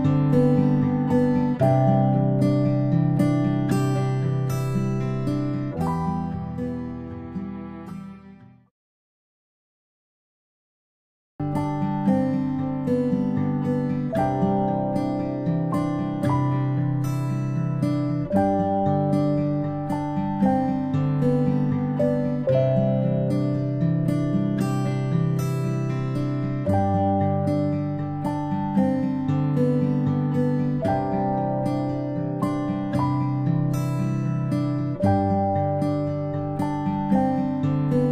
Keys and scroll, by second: 0.5-1.3 typing, 4.8 Delete, 13.5-14.7 ctrl+space, 17.6 space, 19.3-19.6 typing, 22.8 v, 36.8 ctrl+alt+shift+i.